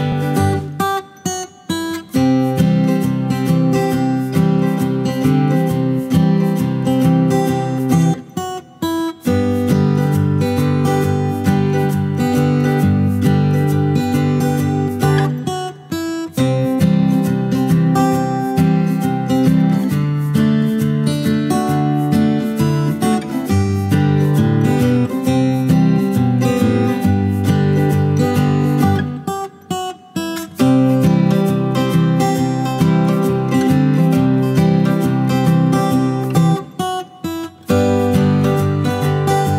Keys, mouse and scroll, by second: 0.0-8.8 typing, 9.4 alt+click, 9.9 shift+click, 10.1 ctrl+alt+click, 12.6 ctrl+alt+click, 12.9 shift+click, 14.1 w, 18.2 alt+click, 18.4 ctrl+alt+click, 19.5 alt+click, 19.9 alt+click, 20.1 ctrl+alt+click, 20.8 shift+double click, 21.0 shift+click, 21.2 alt+shift+click, 21.4 ctrl+alt+click, 21.6 shift+click, 21.7 shift+double click, 22.0 shift+click, 22.2 shift+click, 22.4 shift+double click, 22.6 alt+shift+click, 23.4 shift+click, 23.7 alt+click, 23.9 alt+shift+click, 34.2 alt+click, 35.1 alt+click, 35.6 F8.